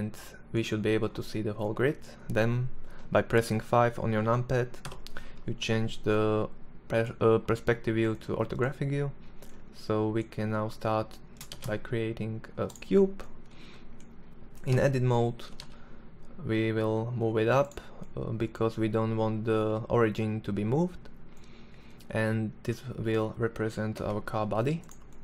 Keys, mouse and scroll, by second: 4.4 KP_5, 11.1 shift+a, 14.2 Tab, 14.9 g, 22.5 s, 25.0 s.